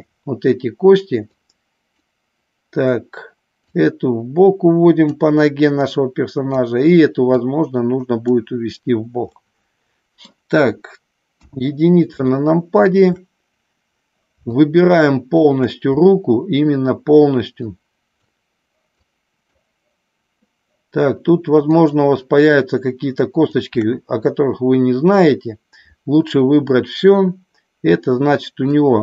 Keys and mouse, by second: 1.2 click, 3.7-5.0 drag, 5.7 click, 7.3-8.3 drag, 9.4 middle click, 11.2 KP_1, 12.4 shift+middle click, 14.5 shift+click, 17.5 shift+click, 18.9 shift+click, 21.6-23.6 shift+drag, 28.6-29.0 middle drag.